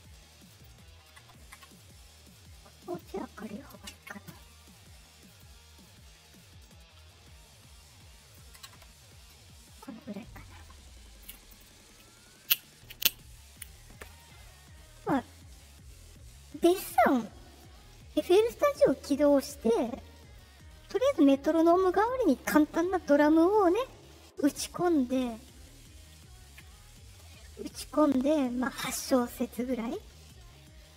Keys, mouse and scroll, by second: 0.4 click, 1.5 Return, 2.8 click, 4.4 middle click, 4.4 scroll, 5.2 click, 6.6-8.3 drag, 8.5 Return, 26.7 middle click, 26.7-27.0 scroll up 2, 29.5 middle click, 29.5 scroll up 2.